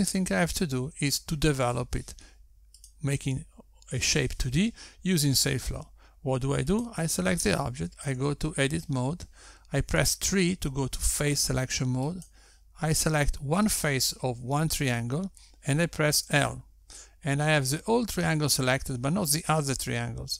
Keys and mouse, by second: 4.8 click, 9.0 click, 10.2 Tab, 11.9 3, 14.3 click, 18.4 l.